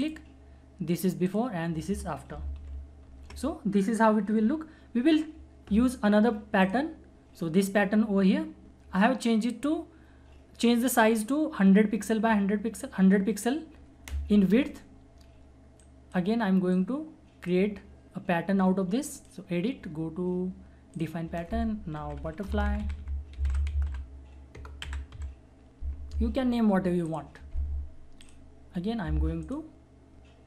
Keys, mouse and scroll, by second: 0.0 alt+click, 2.5 ctrl+alt+=, 6.7 alt+click, 15.8-19.1 alt+drag, 17.0 alt+click, 22.5 alt+shift+b, 22.7 alt+u, 22.8 alt+t, 23.3 alt+e, 23.4 alt+r, 23.7 alt+f, 23.9 alt+u, 24.6 alt+BackSpace, 24.8 alt+l, 25.1 alt+y, 27.0 alt+click.